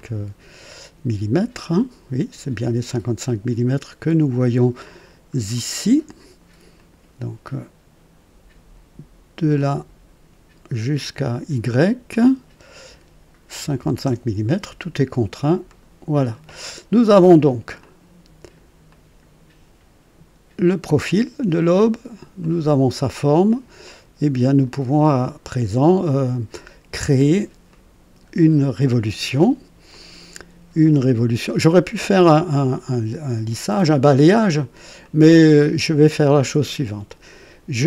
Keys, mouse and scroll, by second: 4.8 middle click, 6.7 click, 9.5 click, 12.1 click, 13.6 KP_5, 13.7 KP_5, 14.0 Return, 15.6 click, 17.7-18.7 drag, 18.9 right click, 22.4 click, 23.8-24.8 drag, 25.7 right click, 26.9 right click, 27.7-28.7 drag, 29.9-31.0 drag, 32.1 click, 35.0 click.